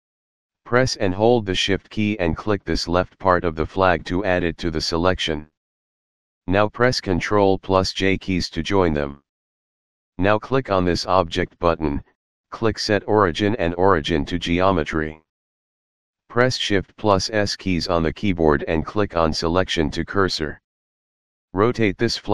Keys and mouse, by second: 2.6 shift+click, 6.9 ctrl+j, 11.0 click, 14.1 click, 16.7 shift+s, 19.0 click.